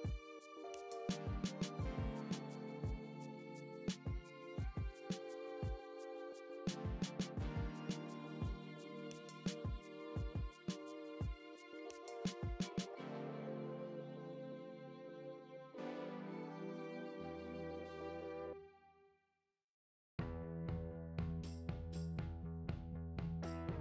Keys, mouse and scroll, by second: 0.0-4.8 typing, 0.9 Tab, 1.6 Tab, 1.7 scroll down 1, 1.9 scroll up 1, 2.2 Tab, 2.4 alt+click, 3.2 alt+shift+click, 3.9 Tab, 4.6 click, 5.4 scroll up 1, 8.7 click, 9.0 scroll down 1, 10.9 click, 11.8 ctrl+l, 13.2 p, 13.8-14.8 drag, 14.8 `, 15.5 click, 16.0 Tab, 16.1-18.6 typing, 16.3 scroll up 1, 17.7 alt+click, 18.4 alt+shift+click, 18.5 ctrl+x, 20.0 Tab, 20.1 `, 20.6 click, 21.3 `, 22.0 shift+click, 23.5 `.